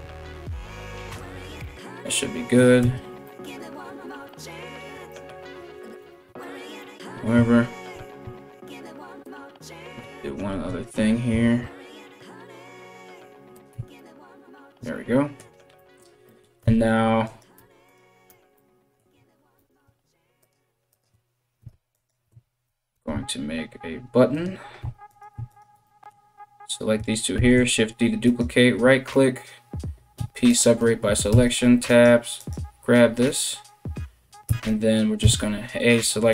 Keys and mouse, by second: 2.4 Tab, 5.6 ctrl+r, 7.5 ctrl+b, 9.6 2, 10.3 alt+right click, 10.6-36.3 alt+middle drag, 11.0 alt+s, 13.3 Tab, 16.2 Tab, 16.9 click, 17.2 Tab, 17.5 click, 17.9 Tab, 19.2 ctrl+r, 21.5 alt+click, 22.5 ctrl+b, 24.4 3, 24.7 right click, 25.1 shift+right click, 27.0 shift+d, 29.8 p, 30.9 Tab, 31.5 right click, 32.0 right click, 34.8 a, 35.9 w.